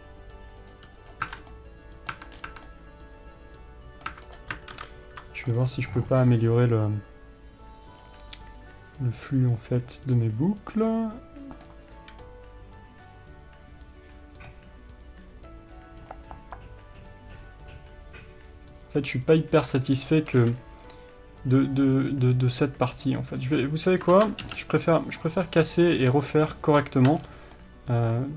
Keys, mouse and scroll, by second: 0.1-0.9 scroll up 2, 0.9 click, 1.3 click, 1.6 Tab, 1.6 scroll down 2, 1.8-20.2 middle drag, 2.5 Tab, 2.7 scroll down 1, 2.8 Tab, 4.4 Tab, 4.5-5.0 scroll up 1, 5.0 ctrl+KP_7, 5.8 scroll up 1, 19.4-20.2 scroll up 1, 20.2 click, 21.1 c, 23.7 click, 24.5 ctrl+z, 25.5 x, 25.9 scroll up 1, 26.1-28.3 middle drag, 27.5-27.9 scroll down 1.